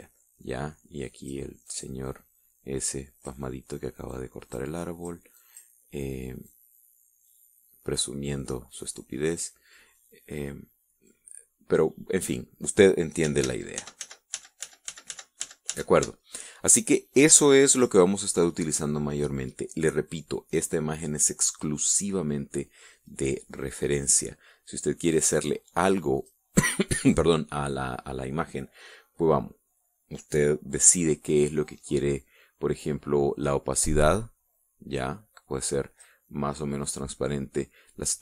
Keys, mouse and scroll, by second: 1.7 click, 2.4 click, 4.8 click, 5.5 click, 6.1 click, 7.2-10.3 drag, 11.8 click, 12.6-14.0 scroll up 1, 14.2 ctrl+z, 24.6 click, 25.9 click, 26.9 click, 34.2-36.9 drag.